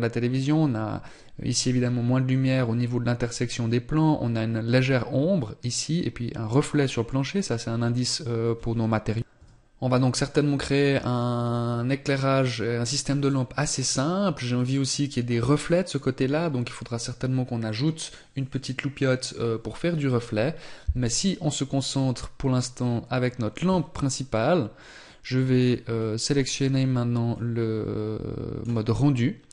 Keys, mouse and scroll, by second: 26.3 click.